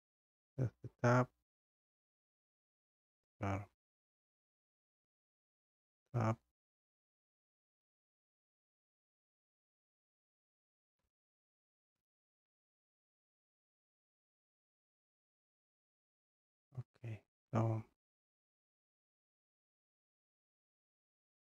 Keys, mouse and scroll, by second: 0.4 click, 2.4 click, 2.6-3.1 scroll, 4.0 click, 6.5 click, 7.8 click, 8.7 click, 11.9 b, 13.5 click, 14.8 scroll, 16.0-16.4 scroll, 17.4 scroll, 17.4 click, 17.8 click, 18.4 click.